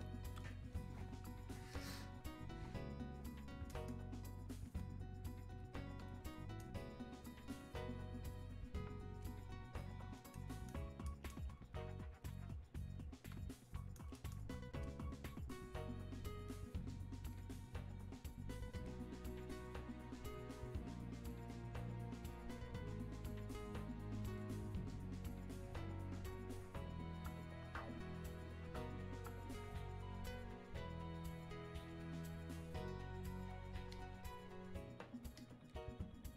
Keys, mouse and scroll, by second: 0.9-1.4 scroll down 1, 1.4-3.2 scroll up 1, 9.2-14.5 drag, 14.8-17.3 drag, 28.8 click, 33.9 click.